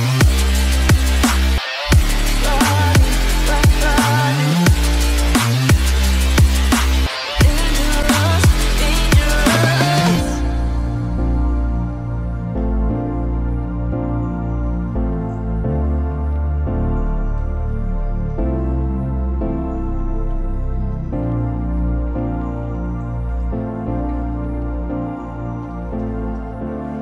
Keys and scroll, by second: 4.5 ctrl+0, 20.4 ctrl+alt+z.